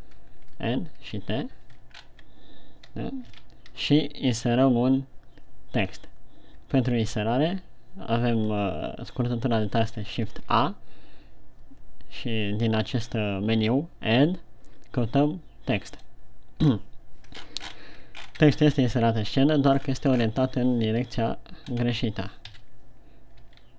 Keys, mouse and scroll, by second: 0.8 n, 1.4 t, 2.3 shift+scroll up 3, 3.6 shift+c, 10.9 shift+a, 17.0-17.4 scroll up 3, 17.9 ctrl+scroll up 8, 19.1-19.9 scroll up 1, 19.9 middle click, 20.2-20.8 scroll down 8, 21.5 shift+c, 22.1 scroll up 2, 22.9 KP_1.